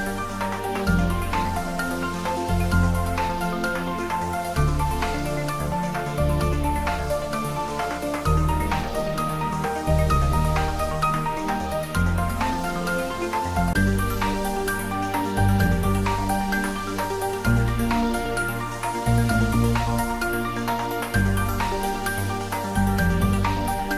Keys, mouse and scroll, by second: 4.9 click, 5.8 Tab, 8.2 ctrl+z, 10.5 scroll down 1, 11.0-12.5 middle drag, 13.6 ctrl+r, 16.0-16.7 scroll down 1, 17.2 click, 22.2 click, 23.2 ctrl+r.